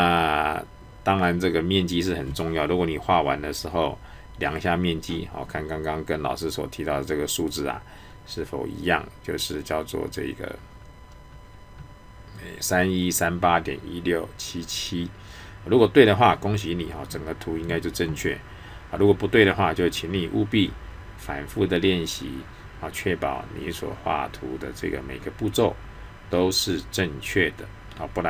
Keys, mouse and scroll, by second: 6.4 scroll up 1.